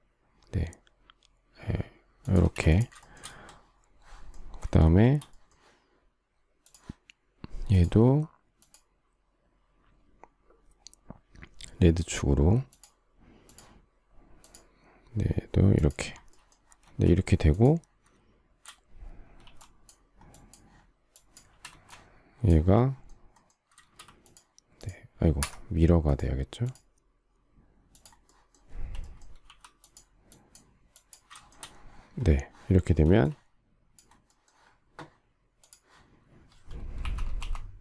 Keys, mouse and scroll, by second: 2.4 space, 3.0 shift+middle click, 3.1 shift+double middle click, 16.8 space, 19.4 shift+e, 21.6 space, 23.8 shift+x, 25.4 Escape, 29.4 e, 31.3 shift+middle click, 31.5 shift+double middle click, 33.0 space, 37.0-37.3 typing.